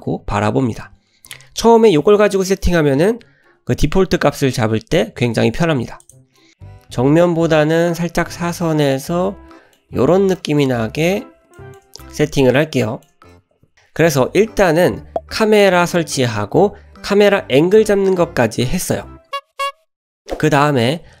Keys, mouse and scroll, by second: 6.0 click, 6.5-9.8 middle drag, 10.4 shift+middle click, 10.7-11.4 scroll up 2, 11.6 shift+middle click, 12.0-12.4 scroll down 1, 12.4-13.1 shift+middle drag.